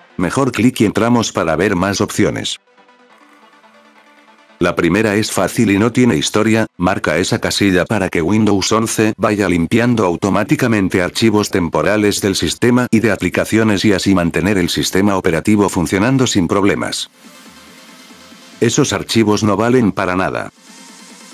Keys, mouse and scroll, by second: 0.2 scroll down 4, 2.4 click, 5.2 click, 5.7 click, 6.2 click, 6.7 click, 7.0 click, 7.4 click, 7.7 click, 7.9 click, 8.2 click, 8.5 click, 8.7 click, 9.0 click, 9.2 ctrl+click, 9.4 click, 9.7 ctrl+click, 10.1 ctrl+click, 10.4 ctrl+click, 10.7 ctrl+click, 11.2 click, 11.7 click, 12.4 click, 13.3 click, 14.2 click.